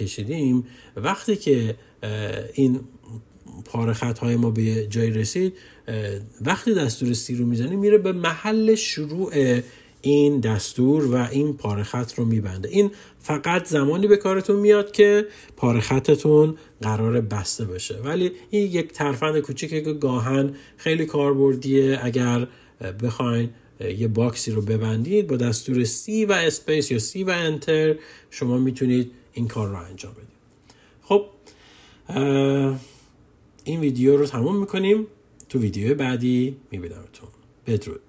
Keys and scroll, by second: 25.2 c, 26.4 space.